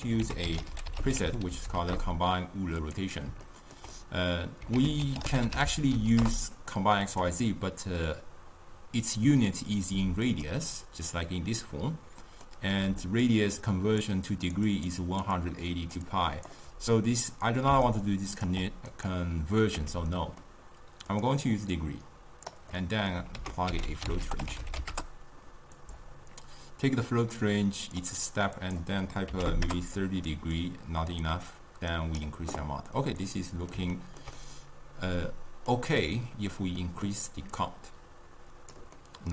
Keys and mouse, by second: 0.4 ctrl+a, 1.7 Down, 3.5-4.9 ctrl+middle drag, 4.9 ctrl+a, 10.4 click, 12.5 middle click, 12.9-16.7 typing, 13.1 click, 13.5 click, 13.9 click, 14.5 click, 14.9 click, 15.2 click, 15.5 click, 16.2 click, 17.8 d, 18.0 right click, 18.6 d, 19.0 click, 19.9 x, 20.2-21.2 middle drag, 21.2 click, 21.9-22.9 drag, 22.9-23.5 middle drag, 23.5 ctrl+a, 27.2-33.1 drag, 33.1-37.6 middle drag, 37.6-39.1 drag, 39.1-39.3 middle drag.